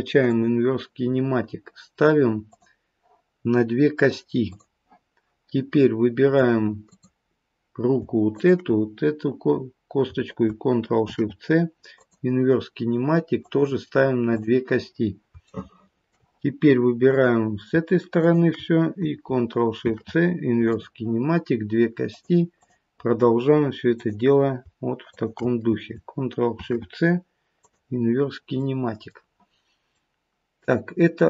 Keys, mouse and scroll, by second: 2.5 click, 3.9 click, 5.8 middle click, 6.9 click, 8.3 shift+click, 11.0 ctrl+shift+c, 13.4 click, 14.3 click, 15.4 shift+middle click, 17.1 click, 18.1 shift+click, 19.8 ctrl+shift+c, 22.1 click, 22.5 click, 24.0 click, 25.0 shift+click, 27.7 ctrl+shift+c, 28.6 middle click, 28.6-29.0 scroll down 2, 30.0 middle click.